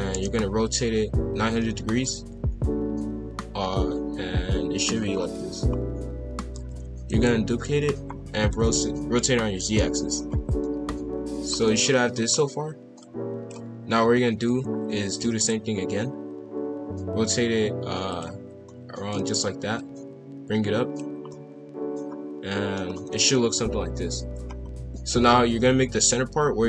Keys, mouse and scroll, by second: 2.0 click, 5.1-5.6 scroll down 2, 5.6-6.1 scroll up 1, 6.1 a, 6.5 shift+d, 8.2 r, 10.6-11.8 middle drag, 11.8-12.3 scroll up 1, 13.0 click, 13.9-15.7 typing, 18.6-19.8 middle drag, 19.8 click, 21.3-22.8 middle drag, 22.8 scroll down 1, 23.1 middle click, 23.3 KP_5, 23.5 KP_1, 24.0 KP_7, 24.4 scroll up 2, 24.7 KP_5, 25.7 shift+a.